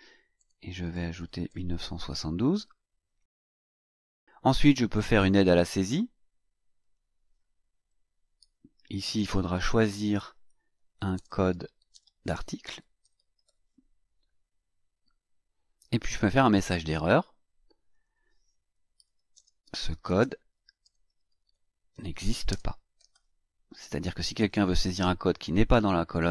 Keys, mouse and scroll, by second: 0.4 KP_1, 0.8 KP_9, 1.1 KP_7, 1.4 KP_2, 3.1 click, 5.2 click, 6.8 click, 8.1-13.9 typing, 16.4 click, 17.9 click, 18.7-23.6 typing.